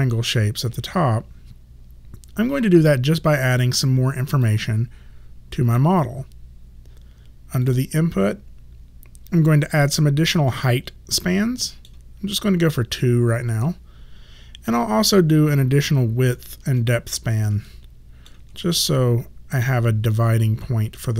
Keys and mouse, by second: 4.5 click, 7.7 click, 9.8 click, 10.6 middle click, 14.7 click, 16.4 ctrl+click, 17.7 ctrl+middle click.